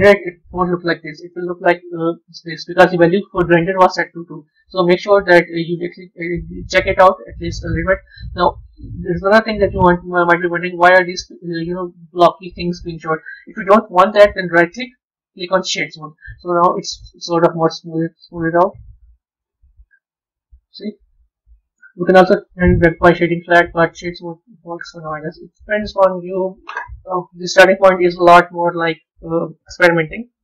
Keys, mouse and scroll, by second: 2.1-5.2 drag, 8.3-14.2 middle drag, 14.4-16.1 right drag, 16.1-18.8 middle drag, 18.8-19.8 drag, 19.8-21.5 middle drag, 21.5-25.1 right drag, 25.1-28.2 middle drag.